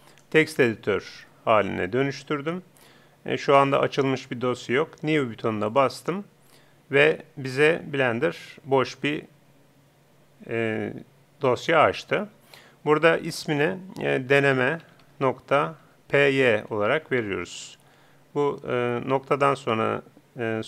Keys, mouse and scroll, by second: 3.9-17.7 drag.